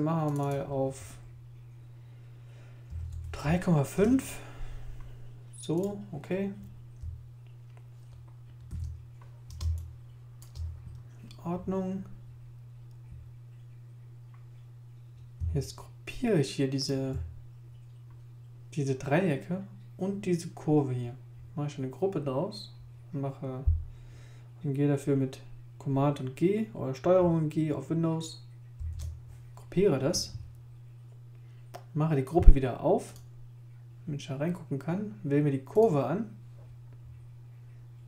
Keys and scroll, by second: 2.6-3.9 typing, 3.9 Return, 8.7 super+i, 9.6 super+space, 28.8 super+g.